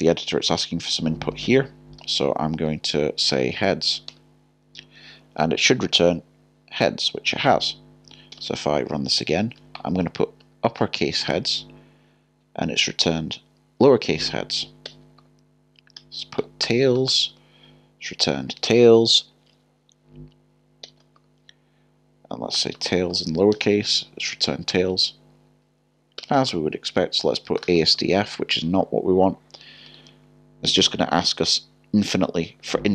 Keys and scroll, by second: 2.0 i, 3.5 BackSpace, 9.7 typing, 16.4 typing, 22.5 typing, 27.6 typing, 29.9 typing.